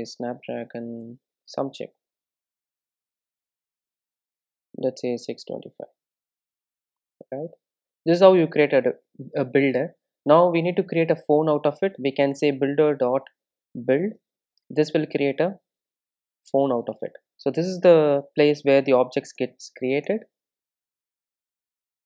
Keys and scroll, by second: 12.4 Return, 16.3 super+z, 17.6 Return, 19.4 alt+Return.